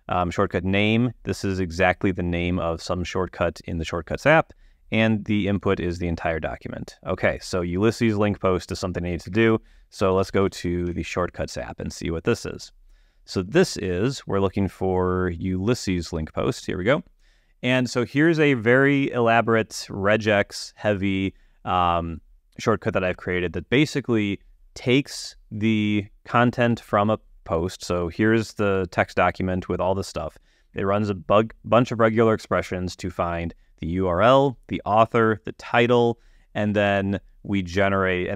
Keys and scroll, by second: 9.7 alt+space, 10.3-11.4 typing, 27.2 ⟲, 30.7 super+Tab.